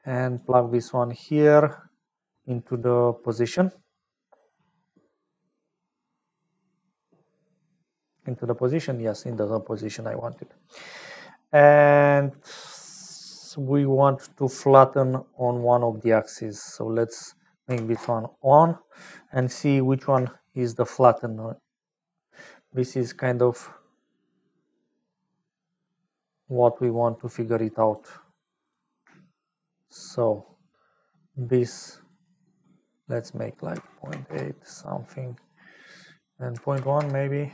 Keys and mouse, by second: 1.2 click, 2.2-8.7 drag, 9.9 click, 10.7 click, 14.6 click, 16.8-18.7 drag, 18.7-21.0 middle drag, 23.2 shift+middle click, 23.6 shift+middle click, 24.8 shift+middle click, 25.6 shift+click, 25.6-26.8 shift+middle drag, 27.8 middle click, 29.6 shift+middle click, 32.1 shift+middle click, 34.9 middle click.